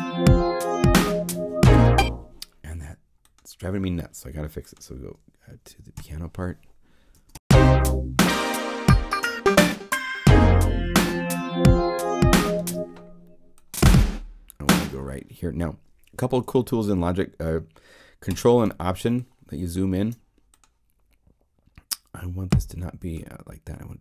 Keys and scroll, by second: 1.7 0, 5.9 p, 7.1 0, 7.3 Home.